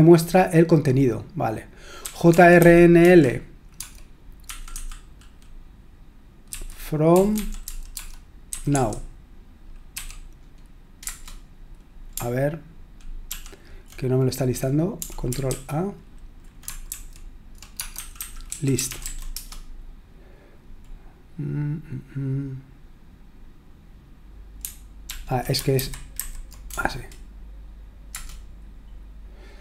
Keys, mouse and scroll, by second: 1.8-4.7 typing, 6.5-9.2 typing, 11.0 Return, 13.3 ctrl+p, 15.5 ctrl+a, 16.9 alt+f, 17.8-19.5 typing, 25.1 ctrl+p, 25.8 alt+b, 26.2 alt+b, 26.7 BackSpace, 28.1 Return.